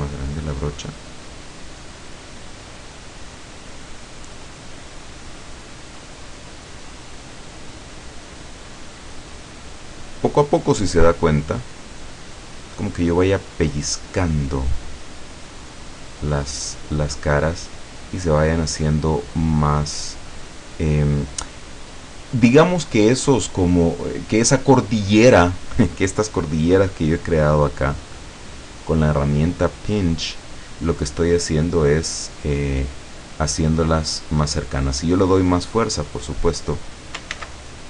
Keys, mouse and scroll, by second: 0.1 click, 1.7 click, 2.0-3.1 drag, 3.5-4.8 drag, 5.1-6.4 drag, 6.5-7.5 drag, 7.9-9.2 drag, 9.4-10.7 drag, 11.0-12.1 drag, 12.4 click, 13.4 click, 14.3 click, 15.0-16.4 drag, 17.8-19.0 drag, 19.4-20.5 drag, 20.8 click, 22.1 scroll down 1, 22.9 scroll down 1, 24.0 scroll up 1, 25.4-25.7 scroll up 1, 26.6-27.7 drag, 28.1-29.2 drag, 29.5-30.5 drag, 32.3 scroll down 1, 33.7-35.0 drag, 35.9-37.0 drag, 37.4 ctrl+z, 37.7-37.8 ctrl+scroll up 1.